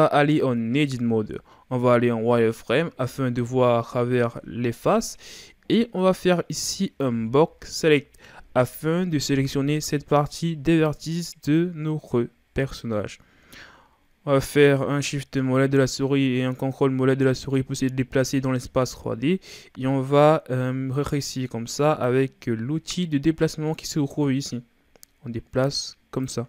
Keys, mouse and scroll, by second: 0.0-0.7 scroll up 2, 0.7 Tab, 2.3 z, 4.8-5.3 scroll down 1, 5.3-6.0 shift+scroll up 1, 6.0 right click, 7.1 b, 11.9-12.6 shift+scroll down 1, 12.6-13.2 scroll up 1, 13.2-14.7 shift+scroll down 2, 14.7-17.7 drag, 25.7-26.4 drag.